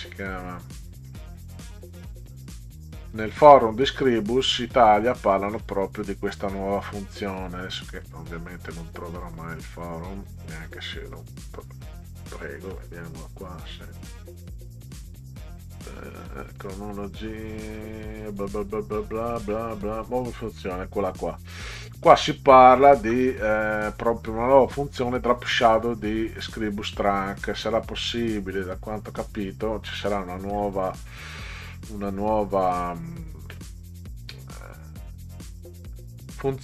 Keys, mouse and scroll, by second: 1.0 click, 2.1 click, 3.9 click, 4.9 click, 7.1 click, 8.0 click, 9.6 click, 11.1 click, 13.1 click, 16.6 click, 20.0 click, 22.0 scroll down 2, 22.6 scroll down 2, 30.0-30.6 scroll down 4, 32.2 scroll up 2, 33.5 scroll up 2.